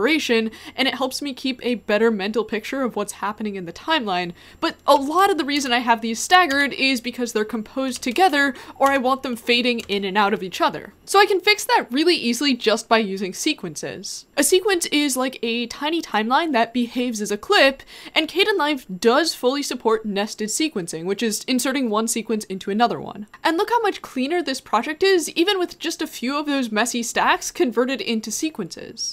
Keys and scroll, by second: 23.1 k.